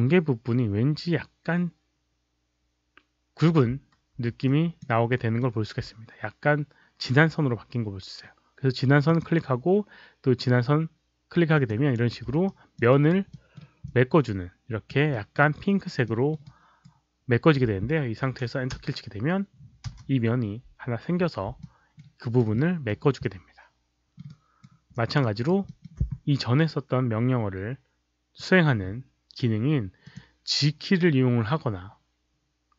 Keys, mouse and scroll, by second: 4.4 alt+click, 5.0 alt+middle click, 9.0 click, 11.4 click, 12.4 alt+click, 12.8 alt+right click, 13.2 alt+middle click, 13.2 alt+click, 13.8-14.8 alt+drag, 15.0 alt+middle click, 15.3 alt+right click, 16.0 alt+middle click, 16.3 alt+right click, 19.8 Return, 21.6 alt+middle click, 22.1 alt+right click, 22.5 alt+middle click, 23.1 alt+middle click, 24.2 alt+right click, 24.8 alt+click, 25.1 alt+right drag, 25.6 alt+middle click, 29.9 click.